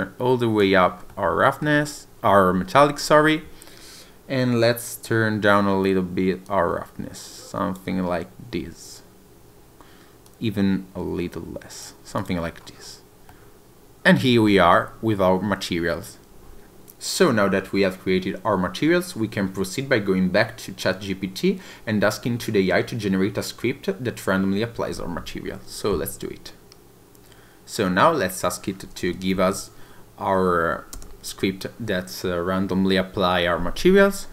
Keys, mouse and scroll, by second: 1.1 shift+middle click, 6.4 click, 10.2 click, 12.1 click, 12.4-13.3 scroll down 3, 13.3 middle click, 14.4-14.8 scroll up 2.